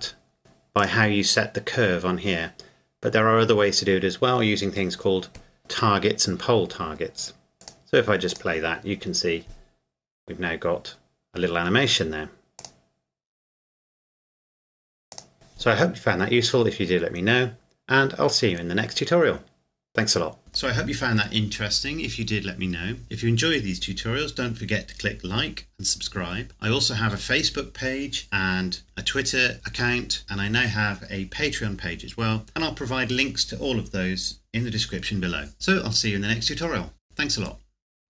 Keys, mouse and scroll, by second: 0.4 g, 0.8 click, 7.5 click, 12.6 click, 15.1 click.